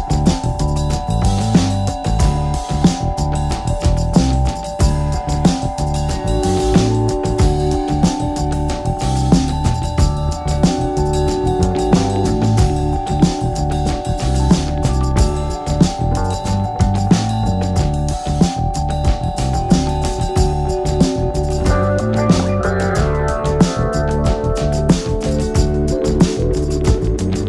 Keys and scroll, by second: 24.7 ctrl+z.